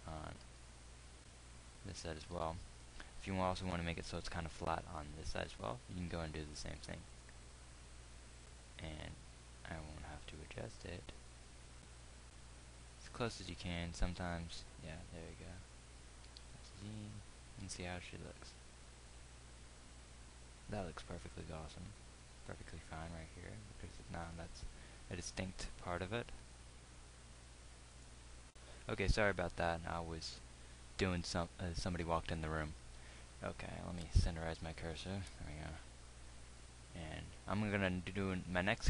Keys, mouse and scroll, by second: 1.0 Tab, 2.9 z, 4.6 ctrl+r, 16.8 z, 18.1 Tab.